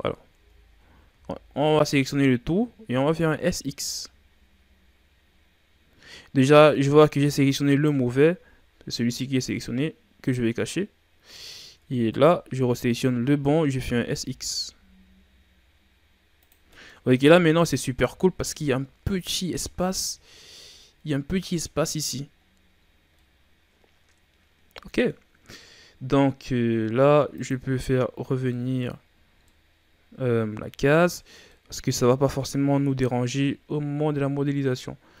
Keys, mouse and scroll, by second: 0.3 Tab, 0.7 a, 1.0 a, 3.0 s, 10.2 click, 11.7 Tab, 12.1 right click, 12.4 Tab, 13.7 s, 16.7 middle click, 16.9 scroll up 3, 17.1 Tab, 17.4 middle click, 17.8 a, 18.2 scroll up 1, 18.2-22.3 middle drag, 22.3-23.1 scroll down 7, 23.1-26.1 middle drag, 27.3 click, 28.4-29.0 middle drag, 29.0-29.4 scroll up 3, 29.4-31.1 middle drag, 31.1 scroll down 3, 31.4-32.5 middle drag, 32.5 scroll down 1, 32.9-35.2 shift+scroll up 3.